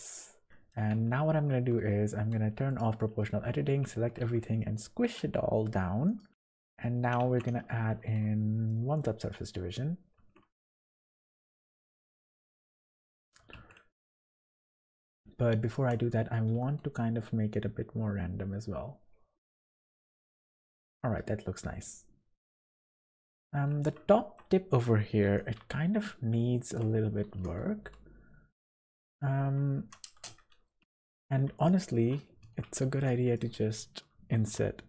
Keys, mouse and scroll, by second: 0.1 middle click, 0.5 Tab, 0.9 Tab, 2.7 click, 3.7 a, 4.1 s, 6.3 Tab, 6.3 middle click, 7.2 Tab, 7.8 ctrl+1, 8.7 middle click, 9.2 click, 9.5 scroll up 2, 10.2 Tab, 10.5 1, 11.0 click, 12.8 s, 13.9 click, 14.2 scroll up 1, 14.2 middle click, 15.6 click, 16.0 middle click, 16.3 scroll down 1, 16.5 g, 20.2 Tab, 20.5 click, 20.8 middle click, 22.9 middle click, 23.2 Tab, 23.7 click, 24.1 shift+middle click, 24.3 shift+middle click, 25.3 o, 25.5 scroll up 1, 26.3 scroll up 1, 26.4 shift+middle click, 27.0 scroll up 2, 27.3 g, 29.8 3, 30.1 space, 31.5 alt+shift+click, 32.4 alt+a, 33.2 b, 34.4 i.